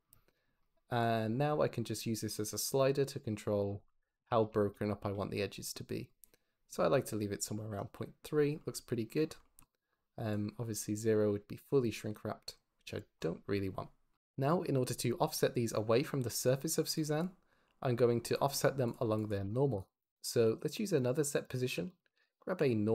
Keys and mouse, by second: 0.9-3.5 drag, 4.3 shift+click, 9.3 shift+click, 10.4-12.9 drag, 16.8 click, 18.8 click, 19.0 click, 19.2 g, 19.5 x, 20.0 click, 20.3 shift+d, 21.5 g, 22.0 shift+a.